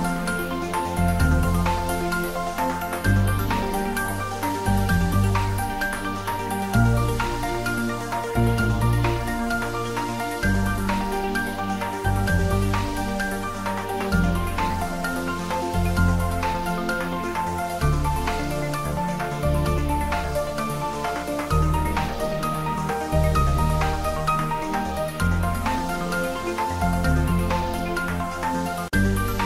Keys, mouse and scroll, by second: 0.1 scroll up 1, 0.6-2.7 drag, 2.7-5.1 middle drag, 5.4-5.9 scroll up 1, 5.9 click, 7.8 shift+z, 8.2-9.2 scroll up 1, 9.5 g, 10.2 Left, 16.3 space, 18.3 `, 18.5 3, 19.2 scroll down 1, 19.4-21.9 middle drag, 22.0 g, 22.2 Right, 25.6 Down, 26.3 Right, 27.2 space, 28.2-28.9 scroll down 1, 28.9-29.4 middle drag.